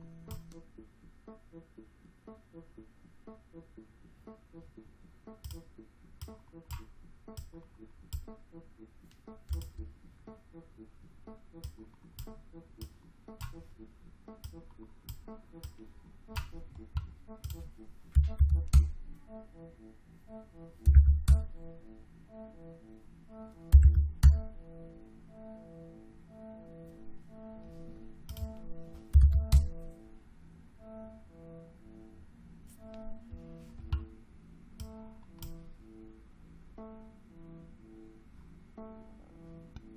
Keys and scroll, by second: 17.9-18.8 typing, 20.5-21.4 typing, 23.4-24.3 typing, 28.8-29.7 typing.